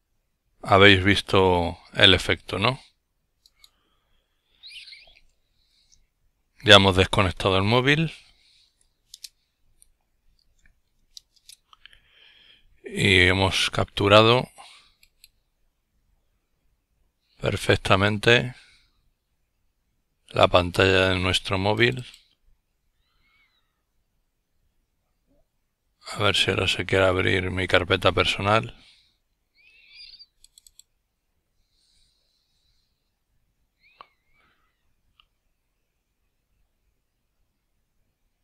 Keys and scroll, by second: 6.5-7.9 typing, 8.3 Return, 10.0 Right, 10.7 Return.